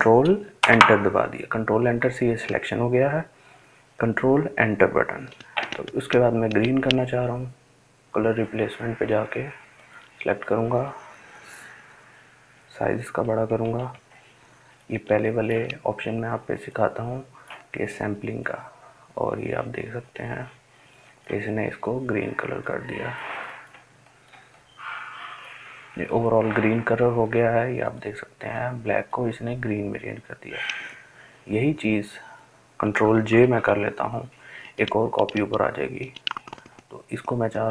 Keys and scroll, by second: 0.3 ctrl+Return, 11.8-12.6 ], 12.8 ], 13.1 ], 32.7 ctrl+j.